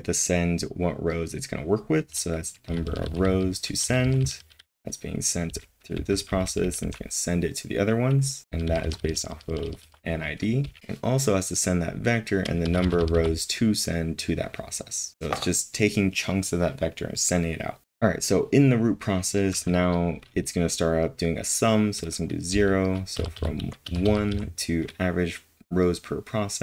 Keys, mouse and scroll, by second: 3.0-8.9 typing, 12.6 typing, 22.5-23.6 typing.